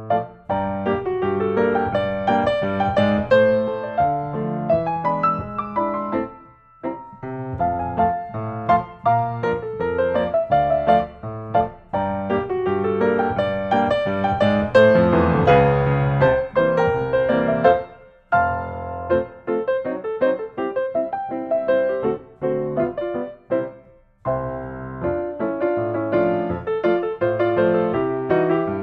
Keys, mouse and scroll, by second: 0.4-1.4 drag, 3.1 s, 4.0 click, 6.5 click, 7.0-7.3 scroll, 8.3 scroll up 1, 9.2 click, 9.4 Escape, 10.0-10.4 scroll up 2, 10.6 s, 12.1-13.8 drag, 13.8-14.9 middle drag, 13.8-14.3 scroll, 16.3-17.4 drag, 19.5-20.6 drag, 21.0-22.1 drag, 25.0 click, 27.9-28.5 scroll.